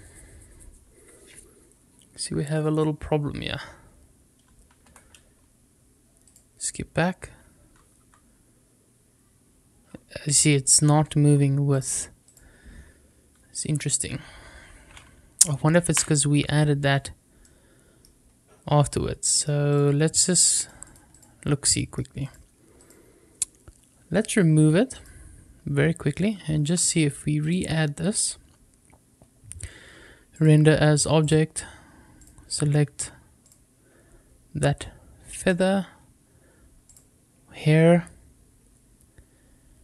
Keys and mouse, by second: 4.8 Escape, 6.1 click, 7.9 r, 10.8 Escape, 11.6 click, 13.5 r, 15.8 Escape, 17.3 middle click, 19.2 middle click, 19.6 click, 20.4-20.9 drag, 21.6 middle click, 22.1 click, 22.7 click, 27.3 click, 30.3 click, 36.8 click.